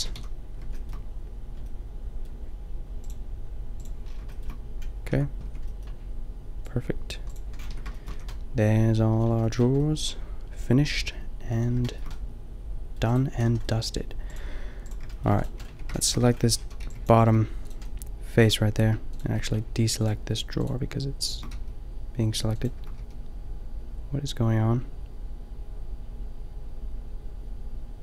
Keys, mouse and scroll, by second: 0.1 click, 0.2 a, 5.1 Tab, 5.5 Tab, 7.7 Tab, 8.1 a, 13.3 a, 13.9-14.6 middle drag, 14.9 a, 15.7 Tab, 16.2 a, 16.6 a, 16.8 b, 17.3 g, 19.2 middle click, 21.5 g, 22.9 g, 23.3-24.8 drag.